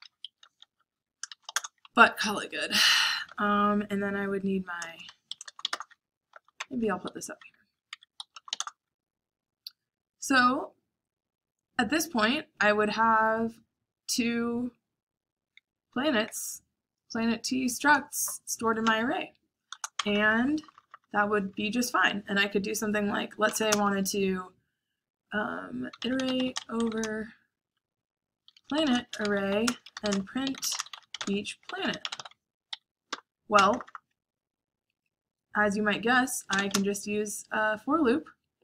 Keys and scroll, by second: 0.0-9.6 typing, 7.0 Escape, 11.8 j, 18.7 o, 19.7 Return, 20.1-20.8 typing, 23.4 /, 23.6 /, 23.6 space, 25.4-30.6 typing, 32.6 Escape, 33.0-34.7 typing, 35.9-37.1 typing.